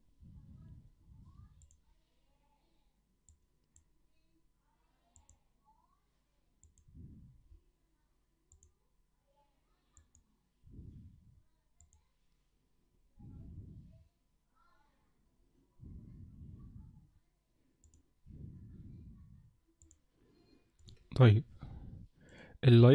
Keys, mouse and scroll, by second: 1.7 click, 17.8 click, 19.8 click.